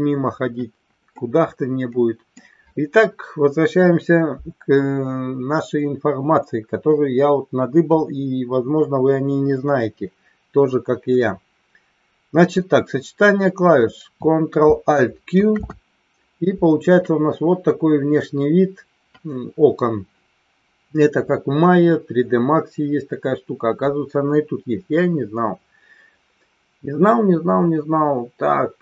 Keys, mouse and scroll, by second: 1.2-2.4 middle drag, 15.8 ctrl+alt+q.